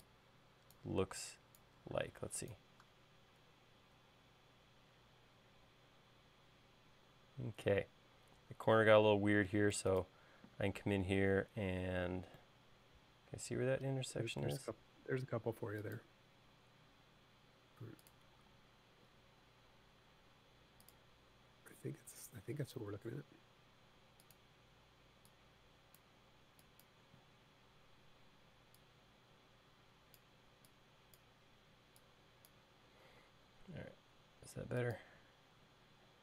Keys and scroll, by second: 0.5 e, 2.7 space, 15.7 l, 19.1 l, 25.3 e, 33.9 space.